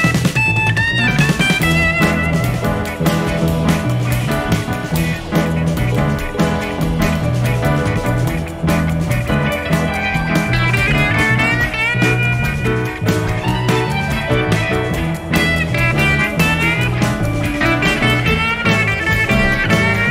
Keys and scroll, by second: 11.3 F1, 12.7 F1, 14.3 shift+F6, 17.2 F1.